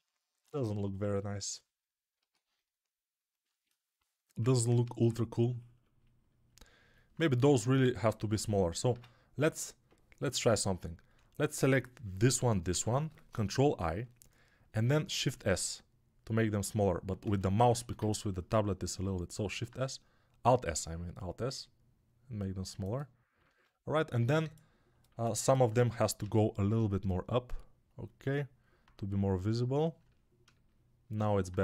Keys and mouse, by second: 0.5-5.9 ctrl+alt+right drag, 2.0 alt+q, 4.7 ctrl+Tab, 8.7 Tab, 10.6-19.2 alt+right drag, 12.1 l, 12.5 l, 13.6 ctrl+i, 15.4 alt+s, 19.4 alt+s, 23.3 ctrl+Tab, 26.1 g.